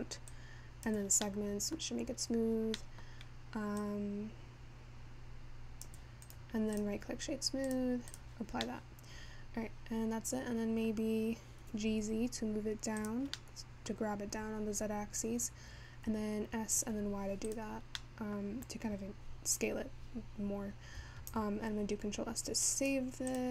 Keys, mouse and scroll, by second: 3.1 middle click, 3.8-14.3 drag, 14.3-15.8 scroll down 1, 15.8-23.3 scroll down 2, 23.3 scroll down 1.